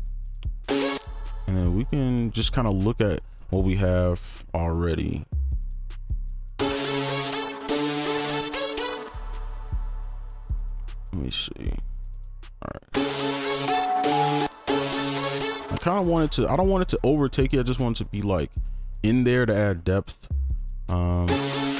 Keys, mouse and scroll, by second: 0.6 space, 0.9 space, 6.0 scroll down 1, 6.3 scroll up 1, 9.0 space, 11.4 right click, 14.1 double click, 14.6 space, 15.7 space, 21.3 space.